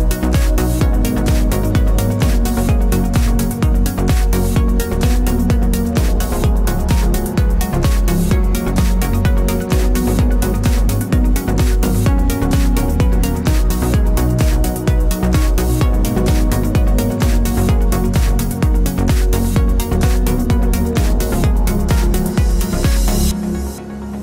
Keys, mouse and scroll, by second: 0.2 middle click, 1.7 click, 2.1 click, 2.4 click, 2.7-10.3 middle drag, 2.9 Tab, 4.0 g, 8.7 Tab, 9.6 scroll down 1, 10.3 click, 10.6 scroll down 1, 10.7-12.3 middle drag, 12.3 click, 12.6-13.6 middle drag, 13.6 shift+click, 13.9 shift+click, 14.1 shift+click, 14.3 shift+click, 14.6 shift+click, 14.8 shift+click, 15.0 shift+click, 15.2 shift+click, 15.5 shift+drag, 15.6-17.0 middle drag, 16.3 r, 17.0 click, 17.2 g, 17.8 click, 17.9-19.0 middle drag, 18.6 Tab, 19.0 click, 19.4 Tab, 19.6 click, 19.8-24.2 middle drag, 22.4 ctrl+s.